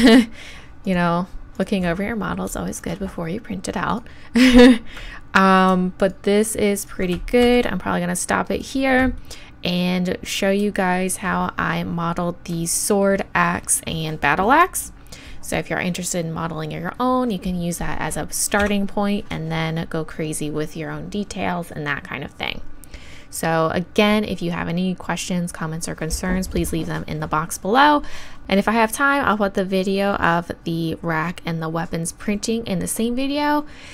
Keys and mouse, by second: 1.1-8.6 right drag, 7.4 shift+e, 8.7 right click, 10.8 middle click, 11.0 middle click, 11.1 middle click, 11.2 click, 11.4-12.5 middle drag, 18.6 Tab.